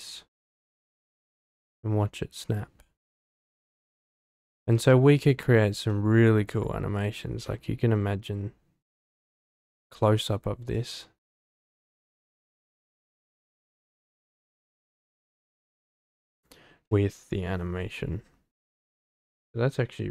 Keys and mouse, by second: 0.1 click, 0.4 space, 4.5 space, 4.8-5.6 drag, 5.9 click, 7.4 shift+middle click, 7.5 shift+click, 8.0-9.7 shift+middle drag.